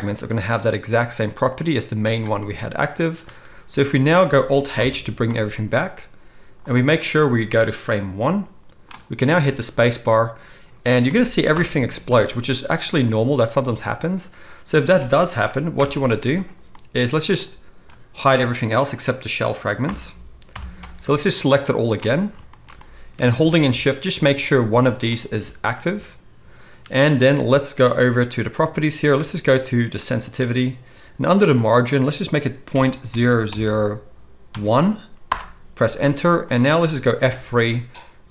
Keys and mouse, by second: 4.7 alt+h, 6.6-24.6 drag, 9.3 space, 11.0 space, 11.5 shift+Left, 13.6 space, 14.8 space, 15.7 shift+Left, 19.8 h, 20.4 KP_1, 24.6-25.0 shift+middle drag, 25.0 shift+click, 25.1-30.0 shift+middle drag, 30.0-38.3 drag, 37.2 F3.